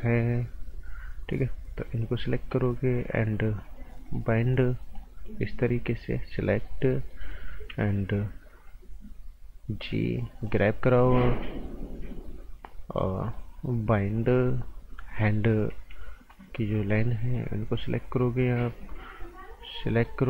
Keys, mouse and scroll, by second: 4.0 click, 5.2 right click, 6.5 click, 6.9 right click, 8.5 g, 10.5 click, 13.2 click, 15.7 g, 16.9 click, 19.9 click.